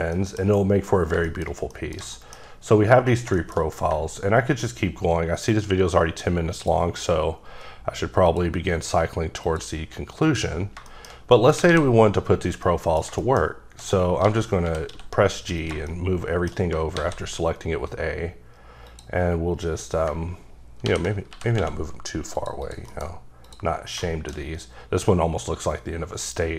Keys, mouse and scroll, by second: 0.2 middle click, 1.0 scroll down 2, 1.3 middle click, 1.7 middle click, 2.1 shift+middle click, 5.5 ctrl+right click, 6.5 click, 7.4-8.3 scroll down 6, 8.3 click, 9.5 click, 10.2 click, 10.7 scroll down 2, 10.9 middle click, 11.3 middle click, 11.7 a, 12.7 middle click, 13.2 shift+middle click, 14.2-14.9 typing, 15.7 shift+click, 15.9 shift+middle click, 16.9 shift+a, 18.9 click, 21.3 g, 21.6 x, 22.3 click, 22.6 double click, 22.9 KP_Decimal, 23.4 click, 24.0 shift+middle click, 24.4 shift+scroll up 2.